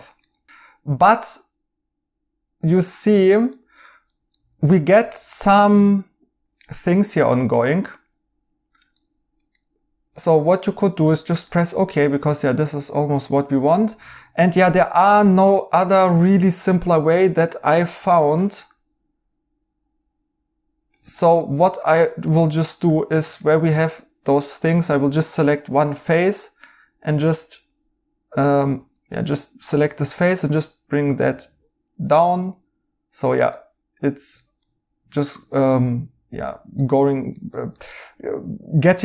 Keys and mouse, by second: 0.2 right click, 3.5 right click, 7.3 right click, 8.9 right click, 11.4 right click, 13.0 right click, 16.4 3, 17.9 r, 20.9 Escape, 21.1 right click, 24.8 right click, 25.6 r, 28.6 ctrl+z, 29.9 g, 32.1 right click, 33.5 right click.